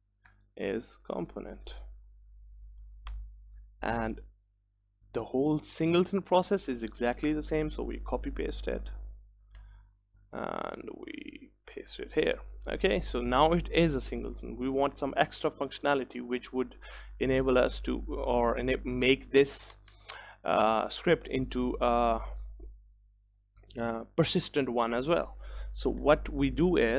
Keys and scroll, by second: 4.2 ctrl+s, 9.7 ctrl+c, 11.5 ctrl+c, 16.6 ctrl+v.